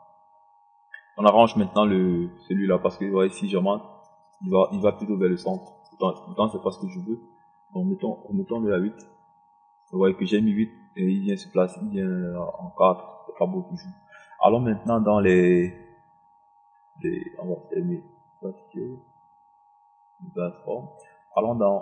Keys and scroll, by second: 8.9 KP_8.